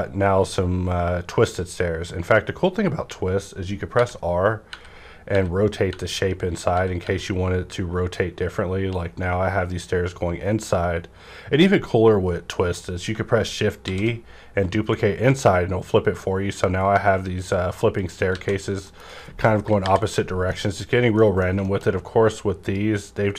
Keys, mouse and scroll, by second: 1.2 scroll up 1, 2.7 scroll down 1, 3.5 scroll up 1, 4.0-7.0 typing, 6.0-6.7 scroll up 1, 13.1 scroll up 1, 13.1-13.8 typing, 18.0 click, 18.0 shift+d, 18.3 alt+a, 18.5-19.8 scroll down 2, 18.9 middle click, 19.8 KP_5, 20.5 middle click, 20.5 scroll down 1, 21.1 middle click, 21.6 shift+middle click, 21.9 scroll up 1, 22.6 click.